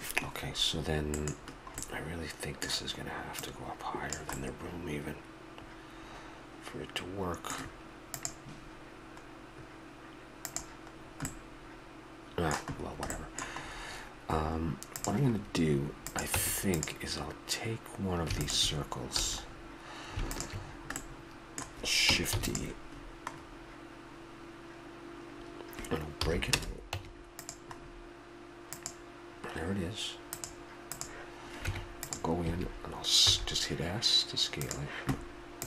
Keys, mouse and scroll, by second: 1.2 click, 1.4-6.1 middle drag, 6.2-8.2 middle drag, 11.0-12.0 middle drag, 12.5-13.7 middle drag, 15.0 right click, 16.1-17.7 drag, 16.3 Tab, 17.7 middle click, 18.4 click, 19.2 a, 19.4-20.6 drag, 20.6 middle click, 20.7 click, 21.3 middle click, 22.4 shift+d, 22.9 click, 26.2 p, 26.9 Tab, 27.8 middle click, 31.6 Tab, 32.4 a, 33.3 s, 34.4 click.